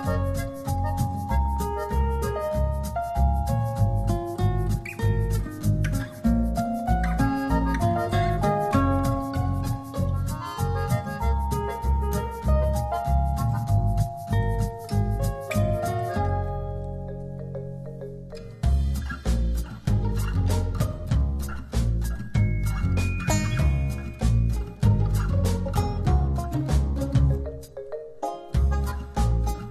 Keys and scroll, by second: 7.2 alt+shift+super+-, 13.2 shift+Down, 16.7 shift+Return, 17.4 Return.